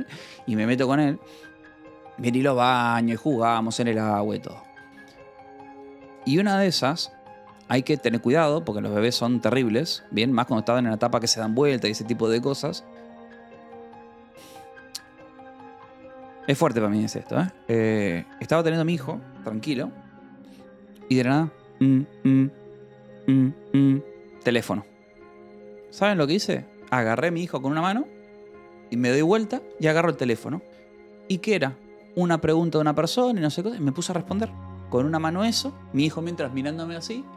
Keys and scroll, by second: 9.4 BackSpace, 11.3 space.